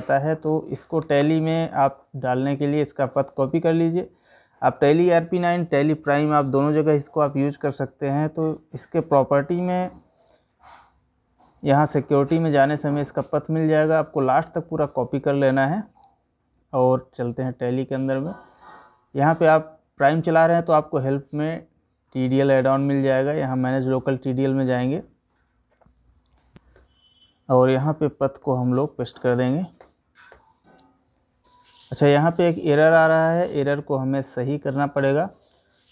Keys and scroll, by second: 15.2 ctrl+c, 27.9 ctrl+alt+v.